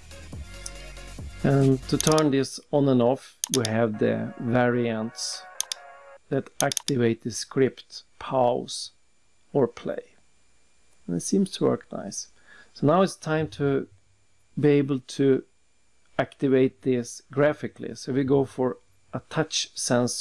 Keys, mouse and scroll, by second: 0.5 click, 2.0 click, 2.6 double click, 3.5 click, 4.0 double click, 5.6 click, 6.6 click, 6.8 click, 7.3 scroll down 3, 7.4-8.0 scroll up 3, 8.1 middle click, 9.2-9.6 scroll up 1, 9.8 click, 10.3 click, 13.6 click, 14.9 click, 16.9 click, 18.1 click.